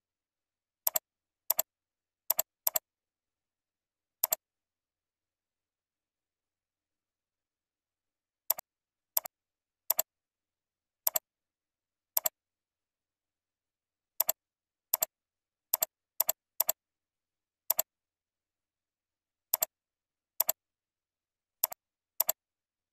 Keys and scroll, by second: 2.1 ctrl+c, 3.2 ctrl+v, 10.6 ctrl+c, 12.4 ctrl+v, 16.8 ctrl+v, 21.1 ctrl+c, 22.5 ctrl+v.